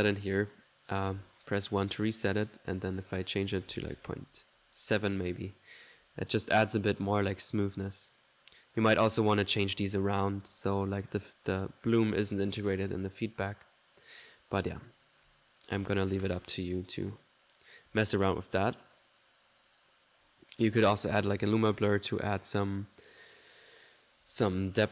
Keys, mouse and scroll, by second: 0.6 click, 1.2 1, 1.9 click, 3.0 click, 6.0 1, 8.3 click, 10.5 middle click, 10.9 click, 13.3 click, 14.5 click, 15.3 click, 15.8 click, 16.3 click, 17.8 click, 18.0 1, 21.8 middle click, 22.3 click, 22.6 right click.